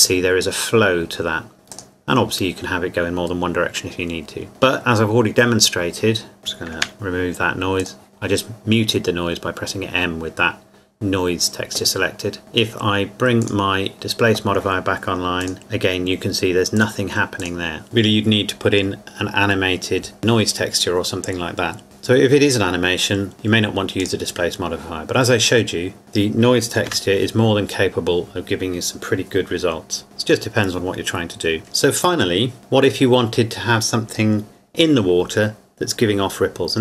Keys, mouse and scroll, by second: 1.7 click, 6.4 click, 6.8 m, 7.8 click, 13.4 click, 15.4 click, 24.0 click, 26.9 m.